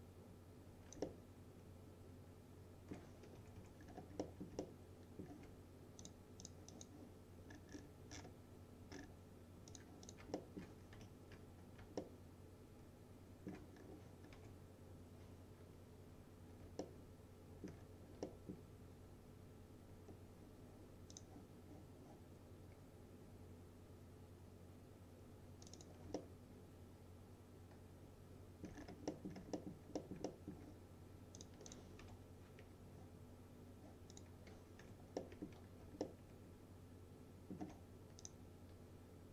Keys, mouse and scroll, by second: 1.1-3.4 alt+middle drag, 3.4 F3, 3.9-4.3 scroll down 1, 4.3 middle click, 4.7-5.3 alt+middle drag, 6.1 click, 7.6-9.8 scroll down 1, 9.8 click, 10.4 alt+middle click, 11.0 F4, 11.6 scroll up 2, 12.1-13.6 alt+middle drag, 13.8-14.4 scroll up 2, 14.4 F4, 16.0-16.7 scroll up 2, 16.9-17.8 alt+middle click, 17.9-18.3 scroll down 1, 18.3 middle click, 21.2 click, 25.7 click, 26.2-28.7 alt+middle drag, 28.8-29.2 scroll down 1, 29.2 middle click, 29.4 scroll down 1, 29.6 alt+middle click, 30.3 alt+middle click, 31.4 click, 32.1 F4, 34.2 click, 34.9 F4, 35.2 middle click, 35.7 scroll down 1, 36.1-37.6 alt+middle drag, 38.3 click, 38.3 click.